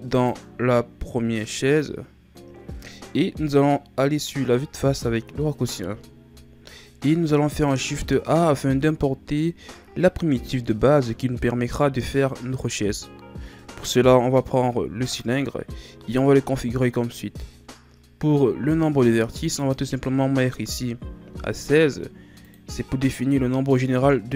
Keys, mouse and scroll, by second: 0.1 click, 4.7 KP_1, 6.4 ctrl+scroll down 1, 6.5 click, 7.9 shift+a, 19.5-22.5 drag.